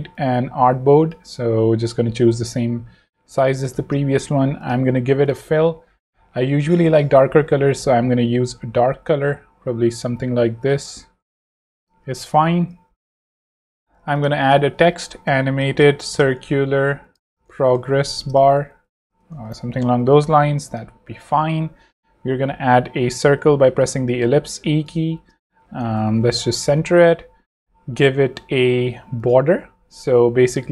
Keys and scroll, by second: 0.9 v, 3.7 shift+space, 4.7 space, 13.2-19.0 typing, 19.3 ctrl+super+c, 19.6 ctrl+super+v, 20.4 shift+v, 21.9 shift+o, 23.3 e, 25.1 shift+v, 26.0 shift+super+v, 26.1 ctrl+super+c.